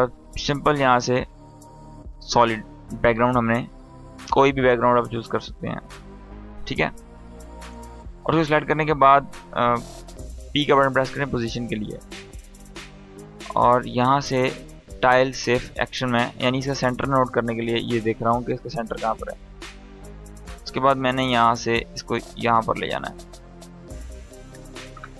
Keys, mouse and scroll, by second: 1.6 click, 4.3 click, 13.0 click, 15.3 scroll up 1, 17.5-22.5 drag.